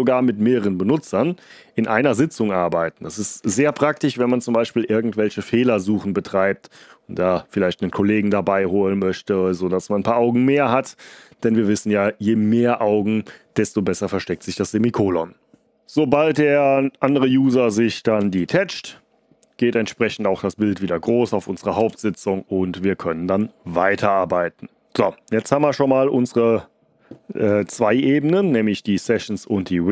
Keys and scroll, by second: 18.1 ctrl+b, 18.6 d, 21.7 ctrl+d.